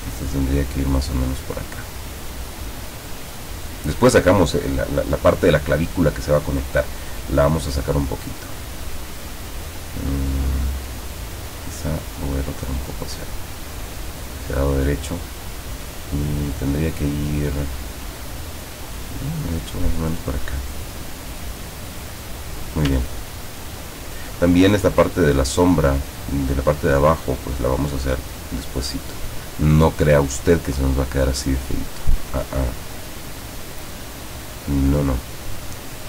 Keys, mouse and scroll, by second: 8.2-10.2 drag, 11.1 click, 11.7-13.5 drag, 13.7-22.3 drag, 23.3-23.9 ctrl+scroll up 4, 29.6 click, 30.1 click, 30.9 click, 31.3-33.2 drag, 34.4 click.